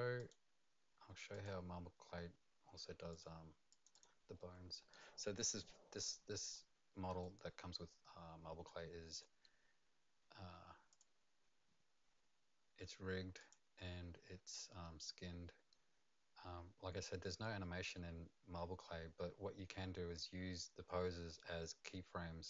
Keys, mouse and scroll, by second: 0.2 middle click, 0.2 click, 1.3 click, 3.1 click, 3.7 click, 3.9 click, 6.5 middle click, 7.2 right click, 10.9 click, 13.4 click, 15.0 right click.